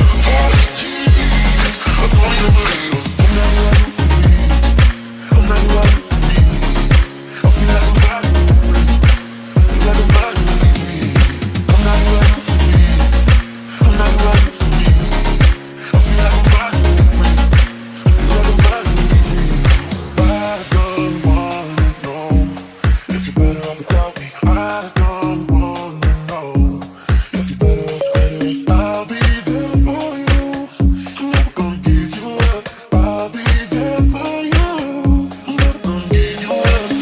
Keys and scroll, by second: 1.0 s, 1.5 w, 4.0 Escape, 6.8 Delete, 8.7 Escape, 10.2 ctrl+z, 12.6 Delete, 13.2 w, 13.8 s, 14.8 q, 23.0 Escape, 23.6-24.9 typing, 28.5-30.1 typing, 31.7-34.5 typing.